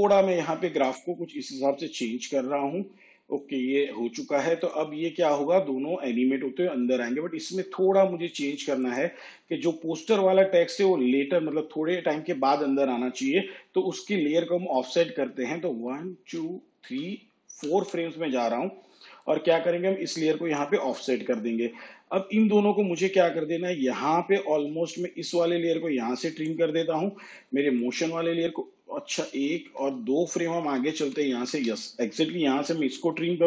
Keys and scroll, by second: 15.9 ctrl+Right, 29.1 ctrl+Left, 31.0 ctrl+Left, 33.2 alt+[.